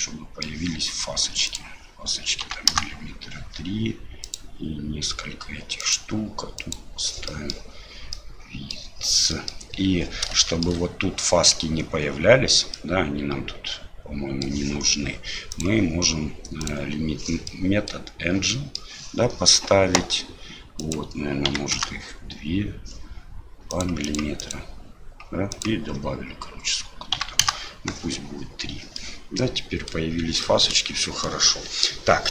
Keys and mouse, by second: 1.5-3.3 drag, 4.2 click, 5.9 click, 7.3 middle click, 8.1 middle click, 9.3 middle click, 10.4 shift+middle drag, 12.7-14.4 middle drag, 15.5-16.7 drag, 17.5-17.9 middle drag, 18.5 middle click, 20.8-22.8 drag, 23.7 click, 25.6-27.9 drag, 28.9-29.9 middle drag, 30.4 shift+middle drag, 30.8-31.3 middle drag.